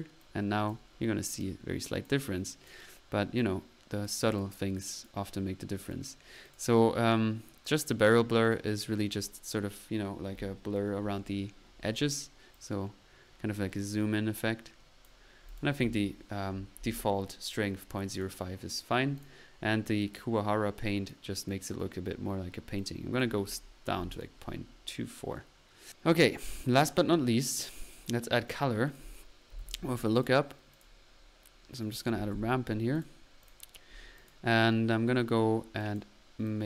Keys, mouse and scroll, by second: 0.2-0.8 drag, 1.3 click, 3.4-4.5 drag, 4.8 click, 7.7 click, 8.5 click, 8.7 click, 12.6-14.7 drag, 14.8 click, 14.8-15.2 typing, 15.8 ctrl+z, 18.1 click, 19.2 click, 21.5 click, 22.8-23.4 drag, 25.9 click, 27.0 click, 27.0 right click, 28.5 right click, 28.6 click, 28.9 click, 29.3-30.1 typing, 30.2 click, 30.8 click, 31.8 click, 31.9-32.6 typing, 32.0 right click, 33.0 drag, 33.5 click, 34.2 click, 35.8-36.2 drag, 36.5 click.